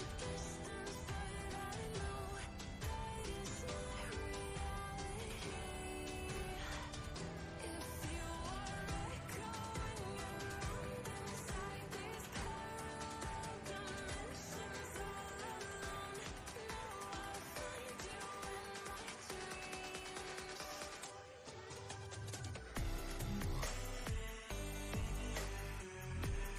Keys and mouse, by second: 4.3-6.8 drag, 8.2 Up, 10.9 Down, 12.1 Up, 14.9 click, 17.1 click, 21.0-26.3 drag.